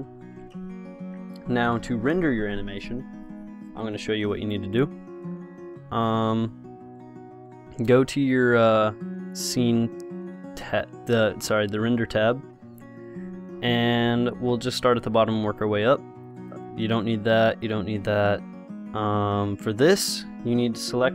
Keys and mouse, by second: 6.2-8.1 drag, 16.5-19.8 drag, 21.0 click.